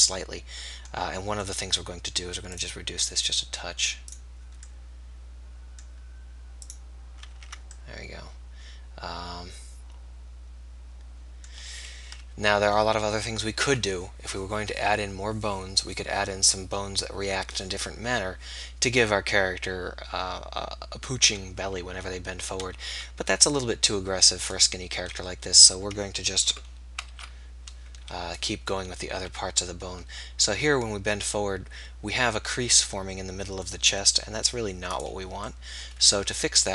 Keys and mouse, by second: 6.2 click, 7.4 ctrl+z, 12.2 KP_3, 23.0 r, 27.0 alt+r, 28.5 click, 29.2-30.4 right drag, 29.2 r.